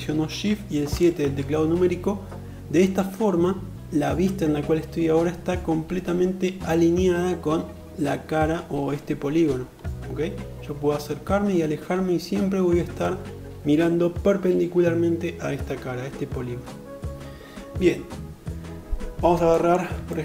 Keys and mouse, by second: 0.7 shift+KP_7.